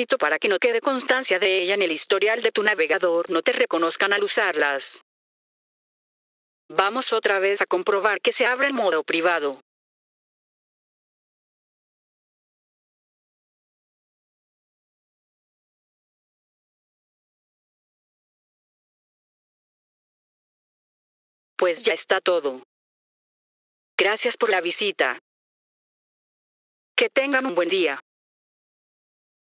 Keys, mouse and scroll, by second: 3.2 F4, 5.9 F4, 6.6 click, 10.3 click, 14.3 click, 20.6 F4, 21.4 click.